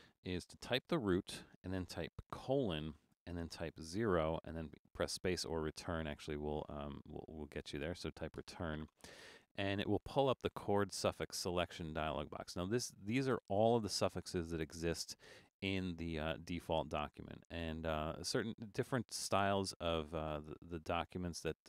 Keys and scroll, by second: 0.8 shift+d, 2.4 shift+;, 4.0 0, 8.5 Return.